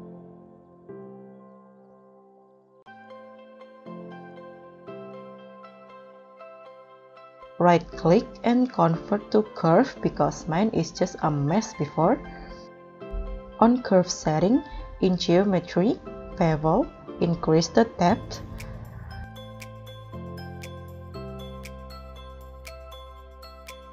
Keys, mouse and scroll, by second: 1.4 s, 4.8 middle click, 6.2-7.6 scroll up 1, 7.6 right click, 13.8-15.7 scroll down 12, 15.7-16.5 scroll down 5, 16.5-17.8 scroll down 6, 21.5 KP_1.